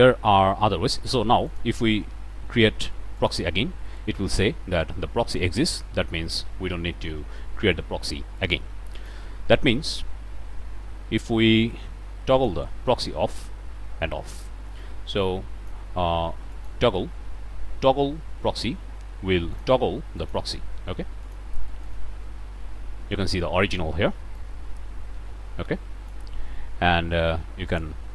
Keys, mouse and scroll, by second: 3.2 click, 7.7-9.2 drag, 12.3 click, 14.8-15.9 drag, 16.5 click, 19.5 click, 20.2 click, 21.2 click, 21.8 click, 24.3-26.3 drag, 27.7 click.